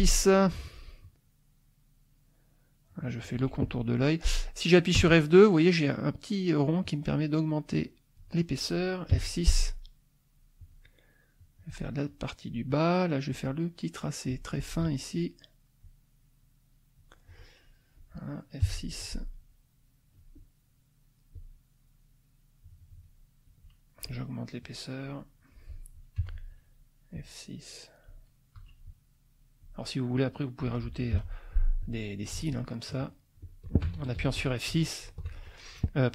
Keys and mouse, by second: 1.0-3.5 drag, 5.0 F2, 6.8-8.3 drag, 9.1 F6, 10.6-11.9 drag, 13.3-14.5 drag, 14.9 F2, 15.8-17.2 drag, 17.6 click, 18.6 F6, 21.3-23.2 drag, 23.5 F2, 24.6-25.6 drag, 26.2 F6, 27.1-28.2 drag, 28.6 F2, 28.8 click, 31.1 F6, 31.8 click, 32.5 shift+click, 33.0 shift+click, 33.4 shift+click, 34.2 ctrl+shift+z.